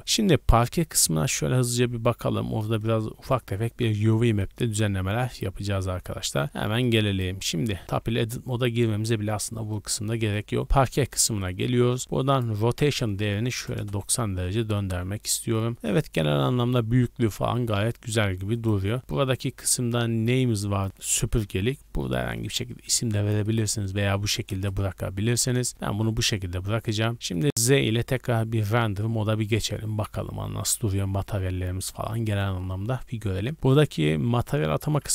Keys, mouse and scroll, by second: 0.3 shift+middle click, 0.7-2.3 scroll down 2, 2.8 click, 3.6 scroll down 1, 3.9-4.5 middle drag, 4.5 scroll up 1, 4.8-6.1 shift+middle drag, 6.1-6.4 scroll up 1, 6.4 shift+middle click, 7.2 right click, 7.5 scroll down 1, 7.8 Tab, 8.8 Tab, 9.2-9.5 scroll down 2, 9.5 middle click, 9.8 scroll up 2, 10.1 middle click, 10.7-11.7 scroll up 5, 11.1 middle click, 12.2 scroll up 1, 12.3-14.5 drag, 14.5 shift+middle click, 14.5 shift+scroll up 1, 14.9 middle click, 15.7 shift+middle click, 16.4-16.8 shift+middle drag, 16.8 scroll up 2, 18.5 right click, 20.8-23.4 drag, 24.5 KP_0, 25.0 a, 25.2 a, 25.3 scroll down 2, 25.7 shift+middle click, 26.6-27.6 scroll down 5, 27.1 shift+z, 27.1 shift+middle click, 27.9 shift+middle drag, 28.1 scroll up 1.